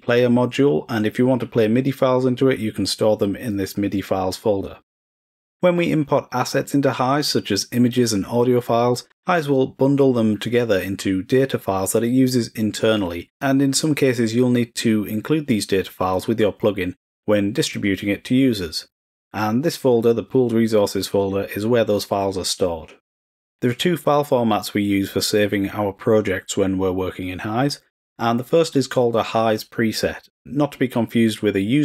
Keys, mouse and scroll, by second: 6.1 click, 23.9 click, 25.4 click.